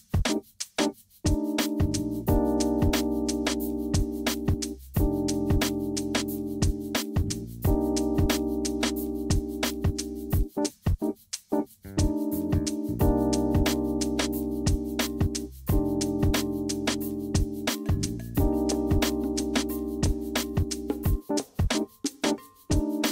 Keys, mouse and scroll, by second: 5.6-7.6 drag, 10.3 click, 10.6 click, 12.7 click, 14.1 click, 15.2 click, 15.8 click, 16.1 click, 16.6 BackSpace, 17.7 click, 18.2 click, 22.0 click, 22.9 click.